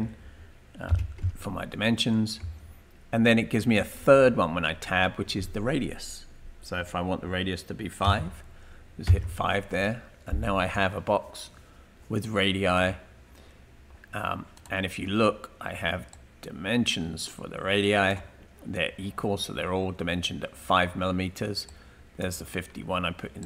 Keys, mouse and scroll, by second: 0.7-3.1 typing, 8.0 typing, 9.3 Return, 14.6 right click, 15.1 typing, 16.1-18.2 drag, 16.8 typing, 21.7 click.